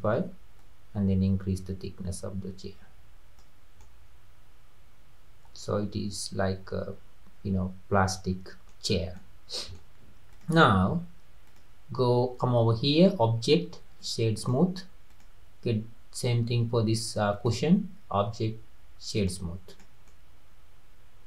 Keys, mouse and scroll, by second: 3.8-6.8 middle drag, 8.9 scroll down 3, 9.2-10.3 middle drag, 10.3 click, 11.5 click, 12.9-15.2 drag, 17.3-19.8 drag, 20.1-21.2 middle drag.